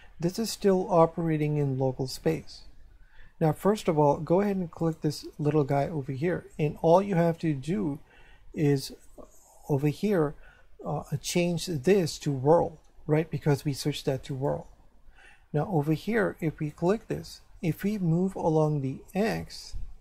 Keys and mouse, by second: 4.8 right click, 11.4 click, 14.3 click, 16.7 right click, 18.6 click.